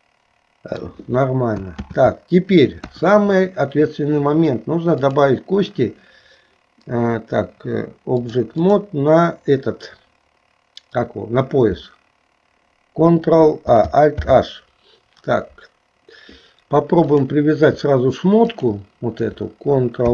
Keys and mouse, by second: 1.9 ctrl+z, 2.8 KP_1, 5.1-6.6 drag, 8.2 click, 14.5 alt+h, 18.5 shift+click, 20.0 ctrl+p.